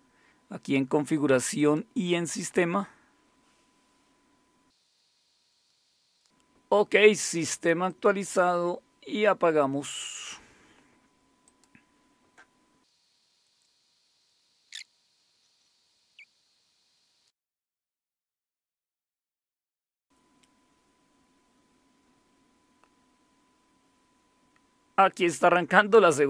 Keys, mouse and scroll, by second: 1.6 click, 2.5-4.8 scroll down 2, 4.9 click, 7.9 click, 9.9 click, 11.4 click, 13.3 click, 14.2 click, 14.4 click, 15.1 click, 15.3 click, 15.4 super+Right, 15.6 shift+super+/, 15.8 click.